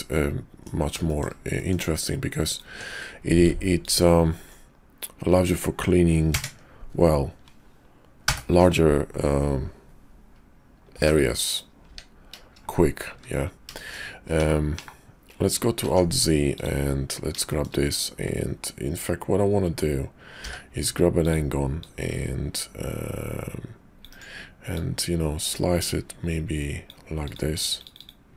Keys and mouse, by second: 1.0 shift+click, 1.5 middle click, 2.7 Tab, 3.7 alt+click, 6.3 ctrl+KP_Add, 8.2 ctrl+l, 10.9 p, 11.8 Tab, 13.1 `, 13.7 shift+click, 14.4 /, 14.7 /, 15.7 alt+z, 17.4 shift+click, 20.3 d, 21.8-24.0 drag, 24.7-26.9 drag, 28.0 click.